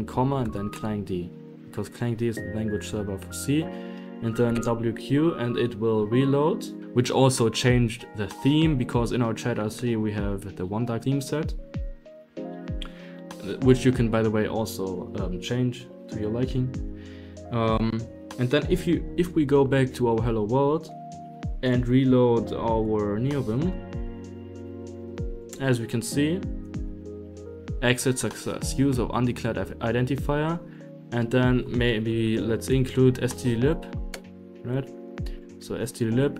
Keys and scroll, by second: 0.0-1.2 typing, 1.6 Left, 1.9 Right, 2.3 Left, 2.7 Right, 3.5 Escape, 3.9-5.5 typing, 5.8 Right, 6.8 Escape, 17.8 super+a, 20.7 Escape, 20.9 Escape, 20.9-23.9 typing, 24.1 Return, 24.6 ctrl+n, 25.4 Return, 26.0 i, 26.8 Down, 27.0 Down, 27.1 Down, 27.3 Down, 27.7 Escape, 27.9-28.6 typing, 30.4-36.3 typing, 34.0 Right, 34.3 Right, 35.0 Right.